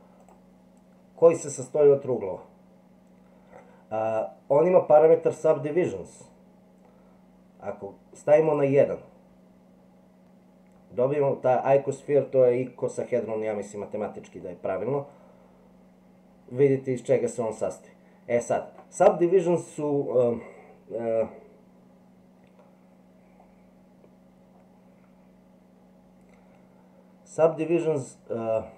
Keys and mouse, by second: 8.4 click, 14.6-18.8 middle drag.